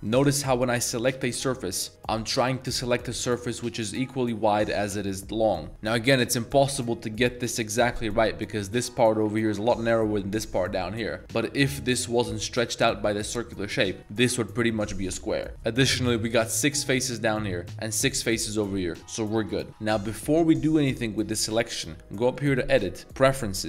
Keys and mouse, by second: 0.1 click, 1.1 ctrl+shift+click, 19.7 shift+middle click, 23.3 click.